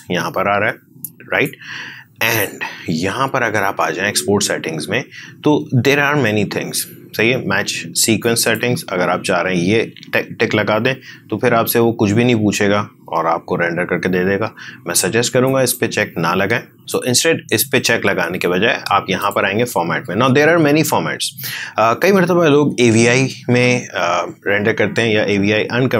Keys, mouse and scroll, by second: 8.1 shift+click, 15.4-19.1 shift+drag, 19.1 shift+click.